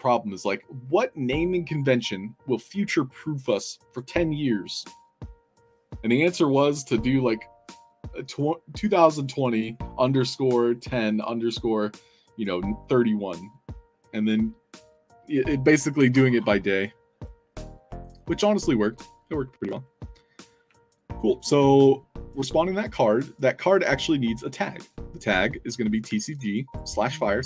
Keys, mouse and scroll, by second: 20.9 alt+click, 22.3 l, 25.7 click, 26.2 ctrl+c, 26.6 click, 26.9-27.4 typing.